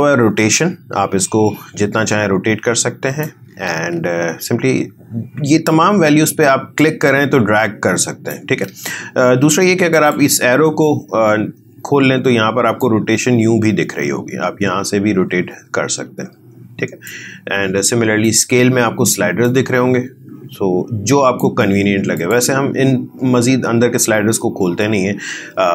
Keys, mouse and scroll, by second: 3.7 ctrl+z, 6.7-8.6 drag, 8.6 ctrl+z, 9.9 click, 12.8-24.6 drag.